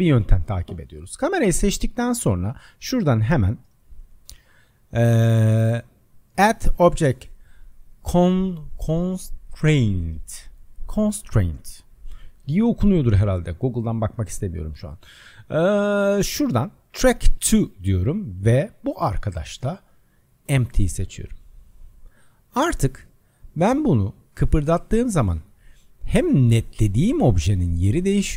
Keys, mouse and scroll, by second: 1.3 click, 2.8 click, 13.5-16.5 drag, 18.8-21.8 drag, 22.7 click, 24.3 click, 26.3 click.